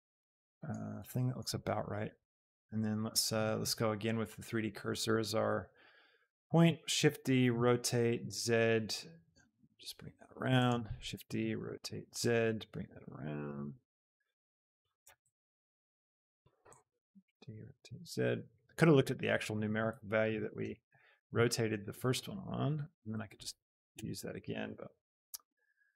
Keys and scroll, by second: 6.4 shift+d, 7.1 Escape, 7.5 r, 8.2 z, 11.1 Escape, 11.1 shift+d, 11.9 z, 15.2 z, 17.4 Escape, 17.4 shift+d, 17.7 r, 18.1 z, 20.3 d, 20.7 Escape, 21.0 r, 21.4 z, 24.0 Escape, 24.0 shift+d, 24.7 z.